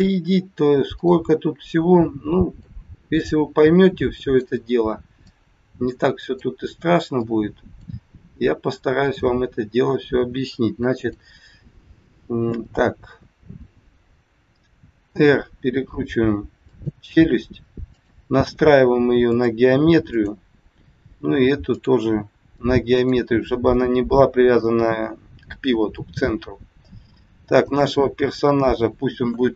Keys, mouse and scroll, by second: 0.9 click, 2.6 click, 7.2 click, 9.0 click, 10.9 click, 15.0 r, 17.9 click, 20.2 click, 23.0 click, 23.4-23.8 scroll down 4, 26.5 scroll up 3, 27.5 click.